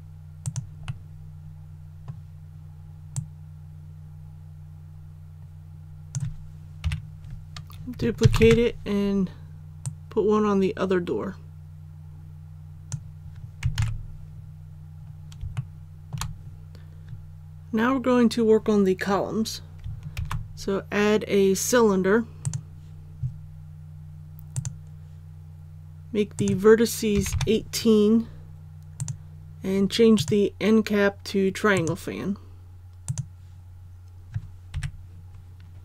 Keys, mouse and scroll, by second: 0.4 click, 0.8-2.2 middle drag, 3.1-6.1 drag, 6.8 KP_1, 8.2 shift+d, 9.8-13.2 drag, 13.7 alt+a, 14.3 scroll down 1, 15.5 shift+middle click, 16.7 click, 20.1 shift+a, 22.4 click, 27.1 KP_1, 27.3 KP_8, 28.9-31.2 drag, 34.7 KP_3.